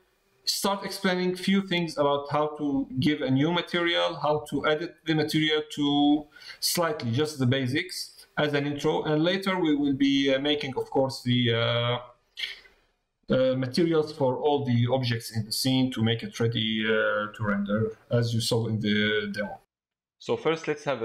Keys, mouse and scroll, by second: 0.7 middle click, 9.8 middle click, 11.0 middle click, 15.4 middle click, 19.0 shift+middle click.